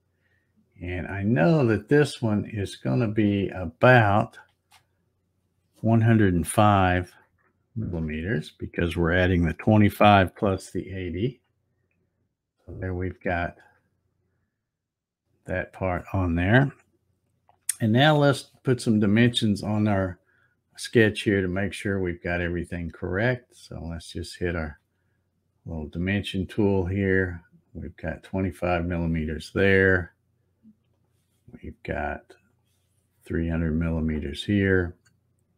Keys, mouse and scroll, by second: 4.4 space, 13.5 click, 23.7 click, 26.6 click, 28.7 click, 30.9 click, 32.5 click, 34.0 click.